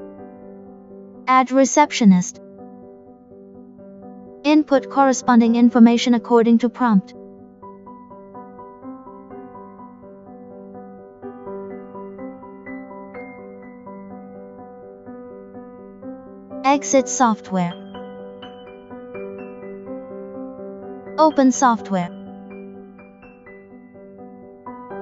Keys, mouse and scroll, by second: 0.2 click, 2.8 click, 4.2 click, 6.6 Return, 14.2 click, 16.4 click, 18.8 click, 19.8 click, 22.2 right click, 23.1 click.